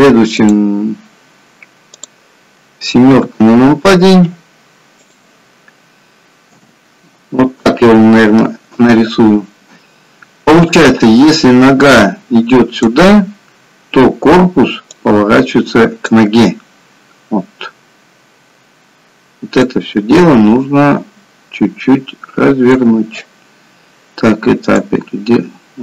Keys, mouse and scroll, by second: 6.4 KP_7.